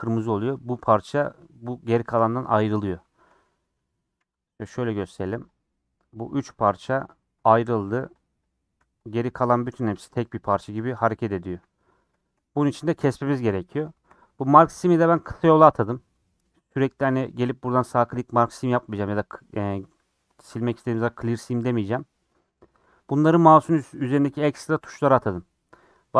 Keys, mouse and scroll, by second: 0.0 scroll down 4, 0.2-3.4 middle drag, 3.4 a, 4.2 u, 5.6 click, 7.2 g, 7.8 click, 8.0 g, 8.5 click, 8.8 g, 9.8 click, 9.9 g, 11.8 middle click, 12.3 scroll up 2, 12.7 middle click, 13.3 scroll up 1, 13.9 middle click, 14.3 scroll up 1, 14.5 2, 14.8 click, 21.1 right click, 21.9 click, 23.8-25.4 right drag, 25.4 scroll down 4, 25.7 middle click, 25.9-26.1 scroll up 2.